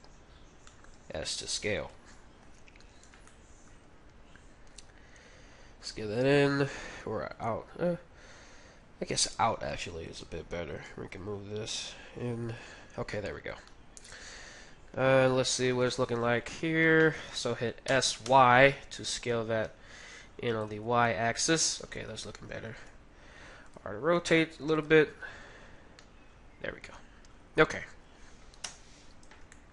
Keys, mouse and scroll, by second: 0.7-2.4 middle drag, 0.9 s, 2.4 KP_1, 3.3-5.4 middle drag, 4.7 s, 10.9 g, 12.8-15.6 middle drag, 13.5 Tab, 15.7 KP_3, 16.7 Tab, 17.1-19.7 middle drag, 17.8 s, 20.6 Tab, 21.6 Tab, 22.7 r, 24.2 g, 25.5 Tab, 25.9-28.1 middle drag, 28.6 KP_1, 29.0-29.7 middle drag.